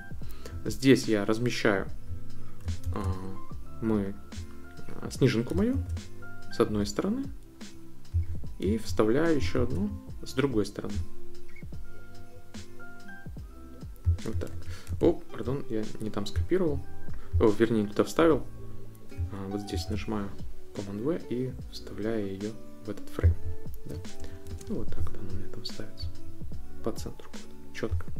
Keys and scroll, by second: 2.8 super+c, 5.7 super+v, 9.5 super+v, 14.5 super+z, 19.7 super+v, 24.3 shift+Right.